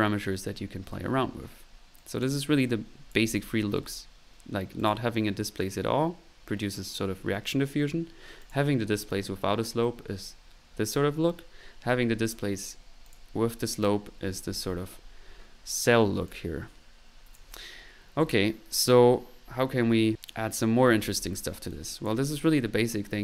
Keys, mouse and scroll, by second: 0.3 middle click, 2.0 click, 2.0 right click, 3.2 click, 4.2 middle click, 4.8 click, 8.4 click, 15.9 middle click, 16.3-17.6 drag, 18.1-18.7 middle drag, 21.7 click.